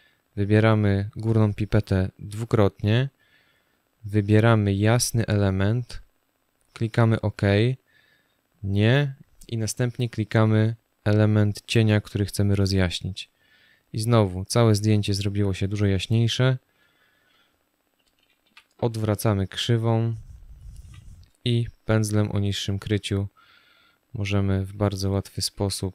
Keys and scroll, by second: 18.1 ctrl+i, 20.5 b, 24.8 ctrl+alt+z.